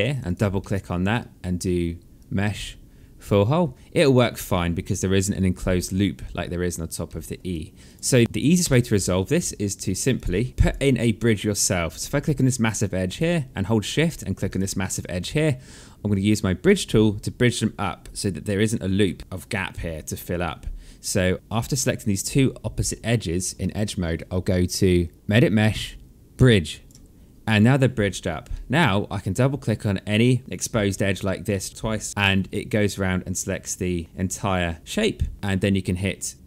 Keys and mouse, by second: 0.1 alt+middle click, 1.7 click, 3.5 alt+click, 5.3 alt+middle click, 6.6 alt+middle click, 7.1 right click, 7.7 click, 8.2 Delete, 9.7 click, 10.1 Delete, 10.5 alt+click, 11.3 click, 12.4 alt+click, 14.0 shift+click, 14.6 alt+click, 18.7 alt+middle click, 19.2 alt+click, 25.1 click, 28.1 alt+middle click, 32.1 alt+click, 34.6 alt+click.